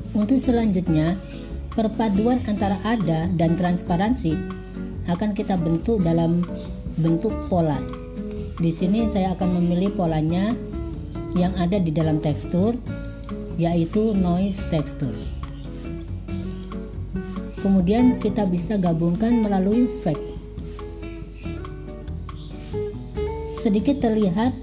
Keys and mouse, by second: 2.4-5.2 drag, 5.9 middle click, 7.0 middle click, 8.4 middle click, 10.5-16.7 drag, 18.3-20.7 drag.